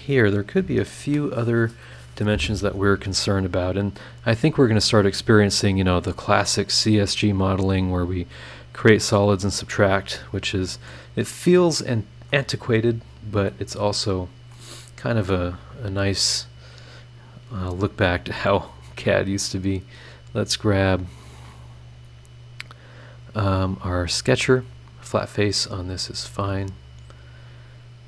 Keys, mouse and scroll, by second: 3.8 scroll down 1, 4.7 click, 5.9 click, 6.6 click, 8.1 click, 8.5 click, 9.6 click, 10.0 scroll down 2, 10.3-10.6 scroll up 2, 10.8 middle click, 11.0-12.5 drag, 12.7 scroll down 2, 13.0-13.4 scroll up 2, 13.5 middle click, 13.6 click, 13.7 right click, 14.1 click, 15.5 click, 17.5 scroll down 2, 20.2 click, 22.8 click, 23.7 click, 24.6 click, 25.3 scroll up 2, 27.4 click.